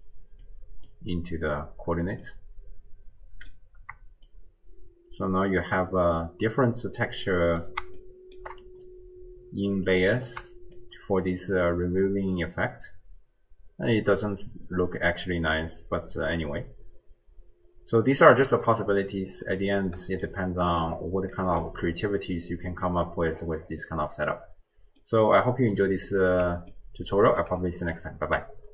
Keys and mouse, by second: 0.5 click, 2.5-3.6 drag, 2.5-3.6 right drag, 4.3-7.6 shift+drag, 8.1 shift+middle click, 10.8-18.5 shift+drag, 20.0 d, 20.2 click, 20.7 d, 21.3 middle click, 21.7 click, 25.0 click, 26.7 ctrl+click, 26.8 ctrl+middle click, 26.9 ctrl+click, 26.9 ctrl+right click, 27.2 ctrl+middle click, 27.3 ctrl+click, 27.6 middle click.